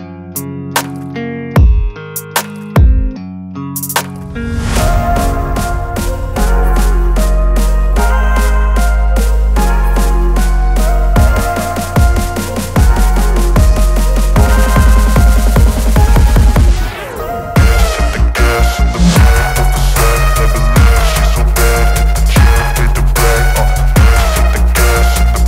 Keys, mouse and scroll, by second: 0.2 click, 0.7-4.6 drag, 6.6 right click, 8.2 click, 13.0-18.3 drag.